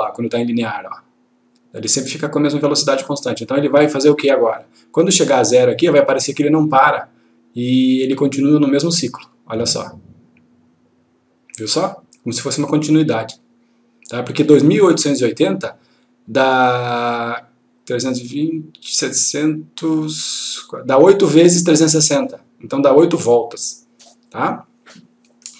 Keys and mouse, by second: 0.6 click.